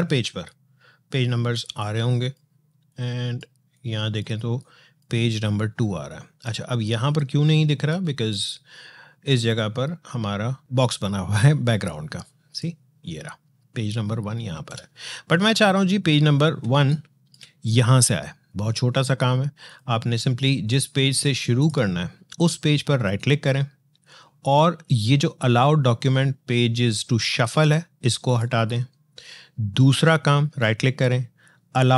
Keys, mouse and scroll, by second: 0.0 alt+scroll down 1, 0.3 alt+scroll up 1, 1.3 space, 1.7 click, 1.8 space, 2.7 click, 2.8 space, 4.4 click, 4.5 space, 5.9 click, 6.0 space, 6.6 click, 6.7 space, 7.3 click, 7.4 space, 8.1 click, 11.7-14.3 drag, 14.3 ctrl+z, 15.4 scroll down 2, 16.4 space, 16.7 click, 16.9 space, 17.4 click.